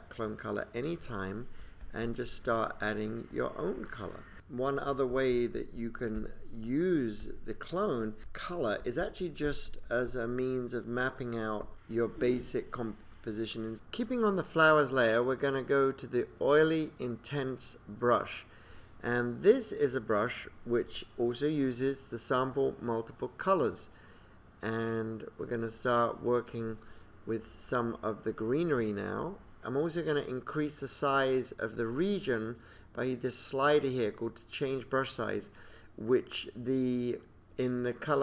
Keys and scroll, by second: 7.7 space, 9.8 space, 10.2 super+=, 10.3 space, 13.3 super+-, 13.4 space, 13.7 space.